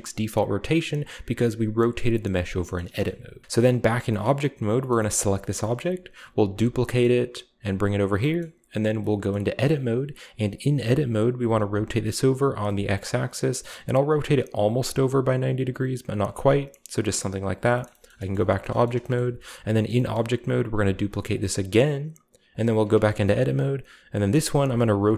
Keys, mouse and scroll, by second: 2.4-3.4 scroll down 2, 2.7 shift+middle click, 3.4 g, 3.5-4.7 right drag, 4.1-4.7 scroll up 1, 4.7 scroll up 1, 5.2 shift+middle click, 5.5 middle click, 5.8-6.4 shift+middle drag, 6.5 shift+d, 8.0 click, 8.2-8.8 middle drag, 8.8 Tab, 9.3-10.3 middle drag, 9.4-10.3 scroll up 1, 11.3 r, 12.6 x, 16.0 click, 16.7 middle click, 16.7-17.3 scroll down 1, 17.5 Tab, 18.0 shift+middle click, 18.2 g, 18.3 middle click, 18.4-19.4 drag, 20.0-20.9 shift+scroll up 2, 20.1-20.9 middle drag, 20.7 d, 21.2-22.4 middle drag, 22.4-23.7 drag, 22.8 Tab, 24.1 r, 24.5 x.